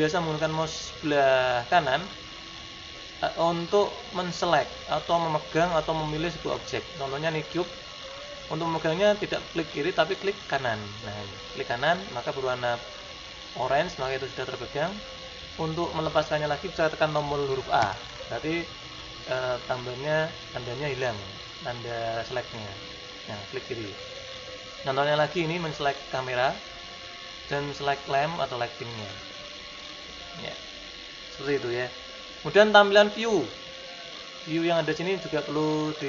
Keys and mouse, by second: 0.1-4.1 middle drag, 5.9-10.6 middle drag, 10.6-12.1 right drag, 18.0 a, 20.6 click, 22.3-24.2 right drag, 25.7-27.5 right drag, 27.9-29.0 right drag, 29.0 middle click, 29.5 middle click, 29.7 middle click.